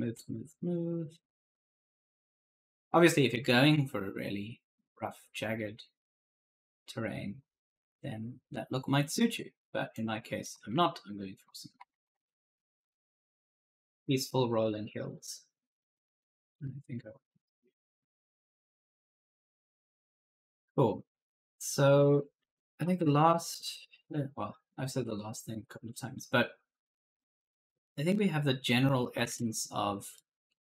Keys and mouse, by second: 9.8 click, 10.2-14.4 typing, 10.3 right click, 15.0 click, 16.8 click, 17.7-22.9 typing, 17.9 right click, 23.6 alt+Tab, 29.1 alt+Tab, 30.0 right click.